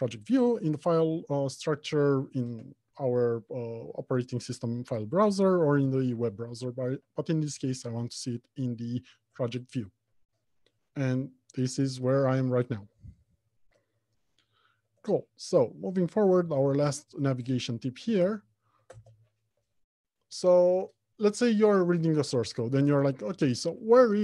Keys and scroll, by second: 13.4 alt+1, 16.7 alt+Home, 17.1 Left, 17.7 Return.